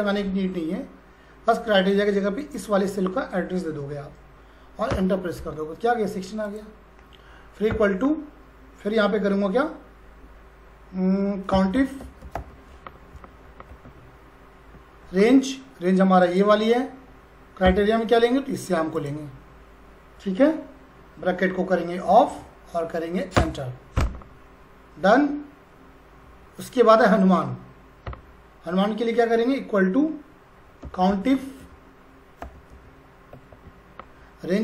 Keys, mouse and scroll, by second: 2.4 click, 4.9 Return, 6.4 click, 7.7 =, 11.3-12.9 typing, 13.1 Down, 13.7 Tab, 16.2 click, 17.6 ,, 18.9 click, 22.1 shift+Num_Lock, 22.1 click, 22.3 shift+0, 23.4 Return, 24.9 scroll down 1, 25.2-26.2 scroll up 1, 27.1 click, 28.1 =, 30.6-32.7 typing, 33.3 Tab.